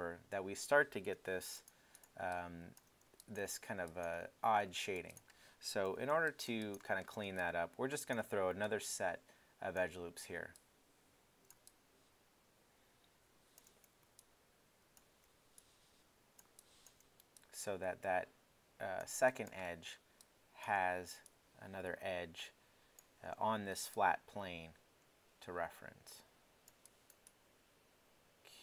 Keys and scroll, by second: 1.1 3, 5.9 alt+i.